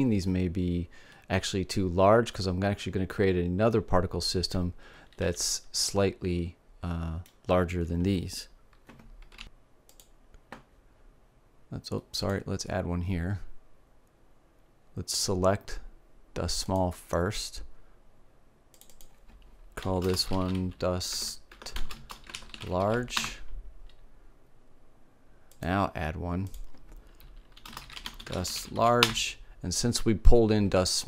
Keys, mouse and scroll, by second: 5.8 a, 6.5-8.3 middle drag, 9.5-10.5 middle drag, 10.5-12.5 drag, 12.5 middle click, 12.8-14.2 drag, 19.4-21.5 drag, 26.1-28.9 drag.